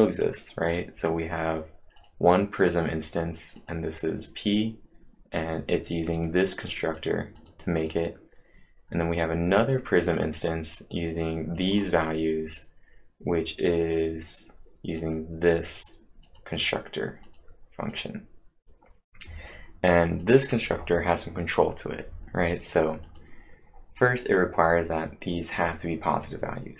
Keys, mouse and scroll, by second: 0.2 click, 2.0 click, 3.6 click, 4.8-5.3 scroll up 4, 6.1 click, 6.5 click, 6.9 click, 7.1-8.5 typing, 7.4 click, 7.8 click, 8.6 scroll down 2, 10.1 click, 11.8-13.6 scroll up 1, 13.6 scroll up 1, 15.0 click, 15.0-15.4 scroll up 1, 15.4 click, 15.8 click, 16.2 click, 18.4-19.2 typing, 20.2 click, 22.5 click, 24.2 click.